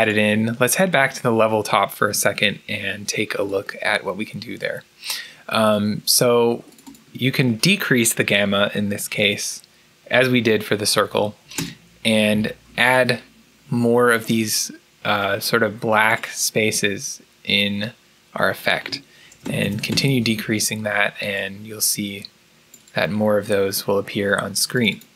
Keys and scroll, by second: 8.9-9.2 typing, 11.0-11.6 typing, 11.4 Return, 18.0-20.3 typing.